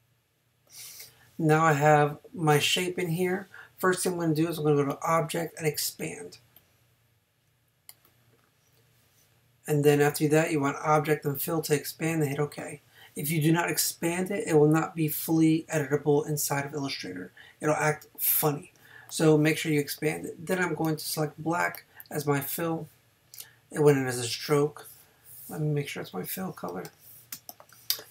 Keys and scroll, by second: 27.3 space.